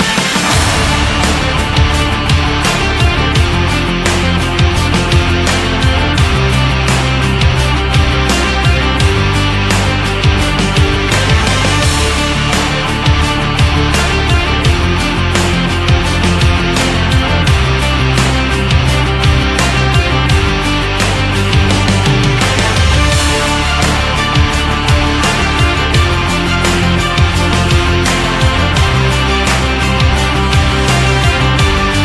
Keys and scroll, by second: 15.2 ctrl+-, 23.0 ctrl+=.